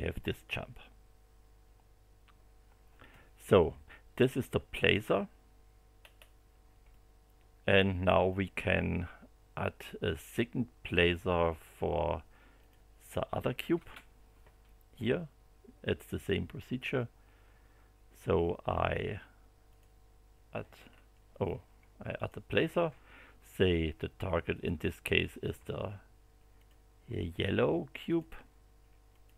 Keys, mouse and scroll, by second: 6.0-6.7 scroll up 3, 6.9-8.5 middle drag, 12.6 click, 13.7 space, 19.7 click, 20.9 scroll down 2, 22.1 click, 24.5 click, 26.6 click, 28.0 click, 29.1 click.